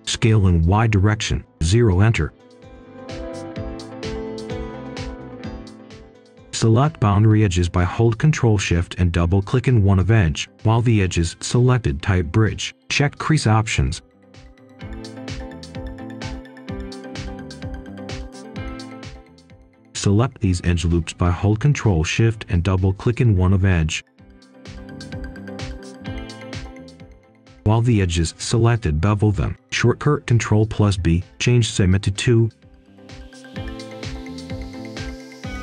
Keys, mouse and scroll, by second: 0.7 0, 1.0 Return, 1.6 click, 1.8 right click, 3.2 click, 3.5 right click, 3.9-4.8 scroll up 1, 4.8-6.5 drag, 6.8 right click, 8.0 ctrl+shift+click, 9.8 typing, 10.3 Return, 12.2 click, 16.7-17.2 scroll up 1, 18.1 ctrl+shift+click, 23.6-25.7 right drag, 26.8 click, 27.5-28.1 scroll up 1, 28.7 ctrl+b, 30.5 click, 31.3 click, 31.8 Return, 33.6-34.9 scroll up 1, 34.9 click, 35.3-35.6 scroll down 1.